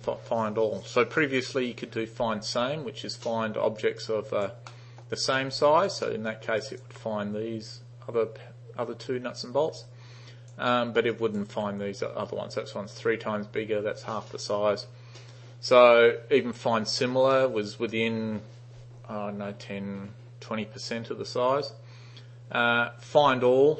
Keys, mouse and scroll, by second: 4.1 alt+right click, 4.7-5.1 alt+middle drag, 5.7 alt+right click, 6.1 alt+middle click, 6.7 alt+right click, 9.9-10.6 alt+right drag, 10.8 alt+middle click, 11.2 alt+right click.